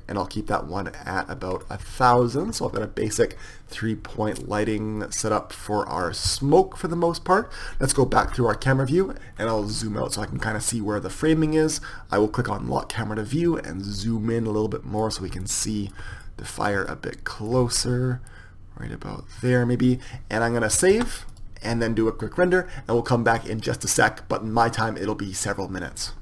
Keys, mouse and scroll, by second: 3.8-9.0 right drag, 9.0 KP_0, 9.3-12.7 middle drag, 12.7-15.3 drag, 15.3-21.0 middle drag, 21.0 ctrl+s.